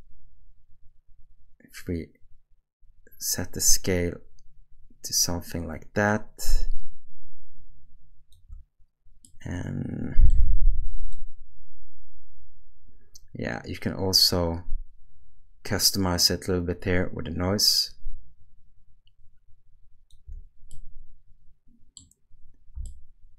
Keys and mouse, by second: 6.0-7.5 shift+drag, 9.3 middle click, 11.3-20.1 shift+drag, 20.7-22.0 middle drag, 22.8-23.3 shift+middle drag.